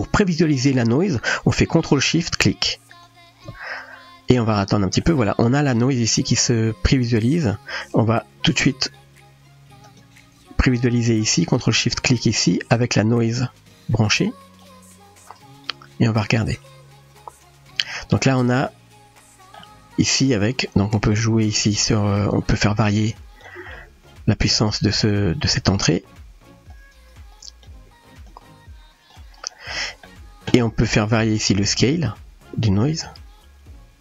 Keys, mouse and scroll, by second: 5.0-5.8 middle drag, 6.9-7.4 drag, 8.2 click, 9.9 click, 13.3-13.7 drag, 14.6-15.9 drag, 18.2-19.6 middle drag, 20.7-23.4 drag, 23.7-24.6 middle drag, 26.7-27.6 drag, 28.2-29.1 drag, 29.8 middle click, 31.5-34.0 drag.